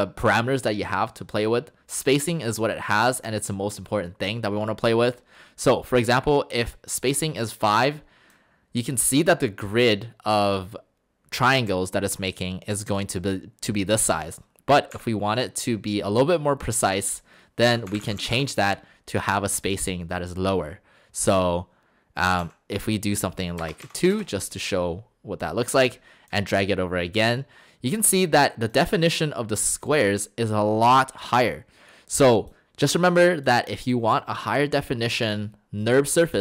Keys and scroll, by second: 15.0 Delete, 17.5-18.7 typing, 22.4 typing, 23.6 BackSpace, 24.1 Return.